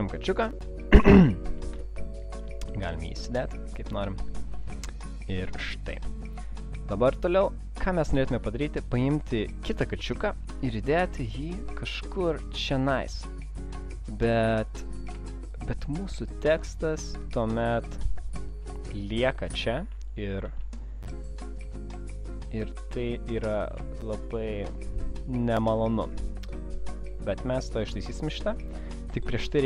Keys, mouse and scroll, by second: 0.0 click, 0.2 click, 0.6-1.0 alt+scroll down 1, 1.0 space, 1.4 click, 2.1 click, 2.4 click, 4.1 click, 8.6 click, 10.5 click, 12.9 click, 15.6 shift+click, 19.3 alt+scroll up 1, 20.0 space, 21.0 click, 21.0 alt+scroll up 1, 21.8 alt+scroll up 1, 24.0 click, 27.8 click, 28.6 click, 29.0 space, 29.3 click.